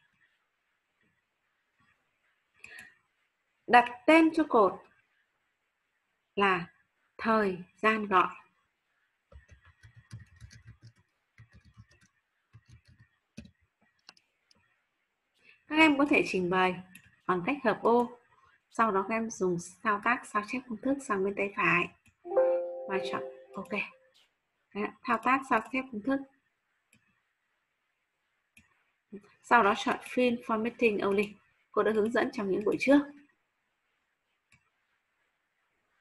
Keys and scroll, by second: 10.5 ctrl+v, 10.7 ctrl+v, 10.7-13.9 typing.